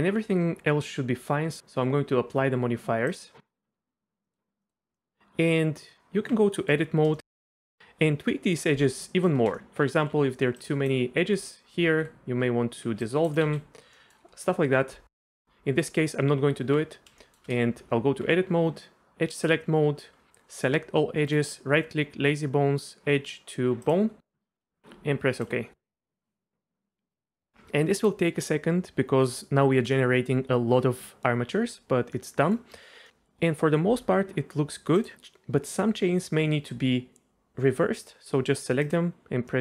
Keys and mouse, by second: 4.2 middle click, 4.6 middle click, 4.9 middle click, 5.2 Tab, 5.5 Tab, 6.6 middle click, 7.1 shift+middle click, 7.4 click, 9.1 click, 9.6 c, 10.1 c, 11.9 ctrl+x, 12.9 c, 13.3 click, 13.5 ctrl+x, 13.9 click, 16.4 Tab, 17.2 shift+drag, 17.8 Tab, 19.4 click, 20.3 a, 21.4-32.3 drag, 32.2 right click, 32.3 middle click, 34.9 click, 39.5 middle click.